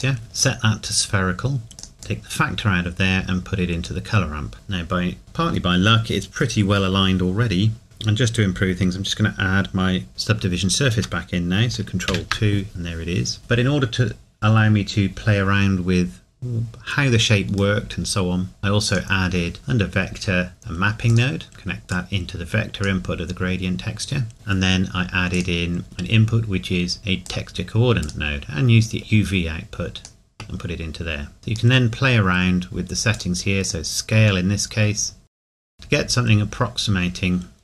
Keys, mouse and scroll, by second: 0.2 scroll up 1, 5.2 scroll down 1, 11.7 ctrl+Num_Lock, 12.3 ctrl+2, 17.8 middle click, 18.5-18.9 scroll down 1, 18.9 click, 21.1 click, 24.3 middle click, 25.3 click, 27.2 click, 32.0-33.1 scroll up 1.